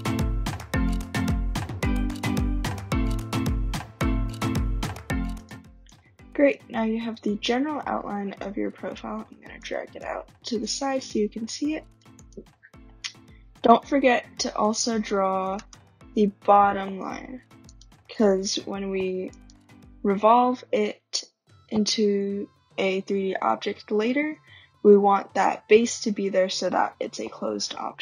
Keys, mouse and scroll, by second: 0.4 right click, 0.6 click, 0.8 click, 1.3 click, 1.5 click, 1.8 click, 2.4 click, 2.5 right click, 2.6 typing, 3.1 click, 3.3 click, 3.9 click, 4.1 right click, 4.1-4.5 scroll, 5.3 click, 6.4 click, 8.8 click, 9.9 right click, 10.6 middle click, 10.8 middle click, 11.9 right click, 12.2 click, 15.3 scroll up 2, 17.3-18.0 typing, 17.6 click, 19.3 click, 23.9 click.